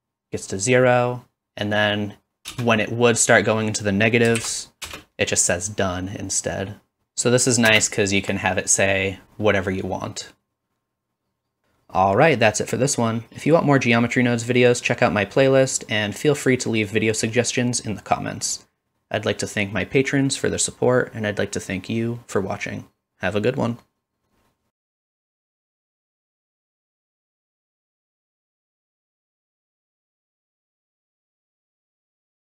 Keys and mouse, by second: 2.3 shift+Left, 2.3-12.5 drag, 2.3 space, 7.0 space, 11.8 middle click, 11.8 right click, 12.2-14.7 typing, 13.3-16.1 shift+drag, 16.2 middle click, 16.3 click, 17.1 middle click, 17.2 shift+click, 17.4-19.2 typing, 17.5-19.5 drag, 18.0 middle click, 19.7 shift+click, 20.3 middle click, 20.4 shift+click, 20.6-21.4 typing, 21.0 middle click, 21.1 click, 21.7 click, 22.6 shift+click, 22.9 middle click, 23.3-24.3 typing, 23.8 click, 24.6 right click, 24.7 click, 24.7-25.7 middle drag, 25.3 click, 25.3 right click, 25.5 click, 25.5 right click, 25.9-27.5 middle drag, 27.7 click, 27.7 middle click, 27.7 right click, 28.5-30.8 drag, 30.5 shift+middle click, 30.8-31.4 middle drag, 31.4 click, 31.8-32.6 middle drag.